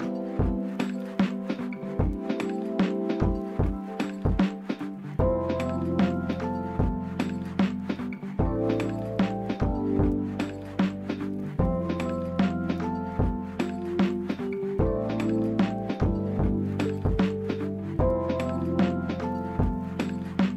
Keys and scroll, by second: 0.0-0.9 typing, 2.0 c, 3.7 d, 5.0 typing, 5.3 Return, 7.0-8.0 typing, 9.6 Escape, 11.6 d, 13.1 typing, 14.5-15.4 typing.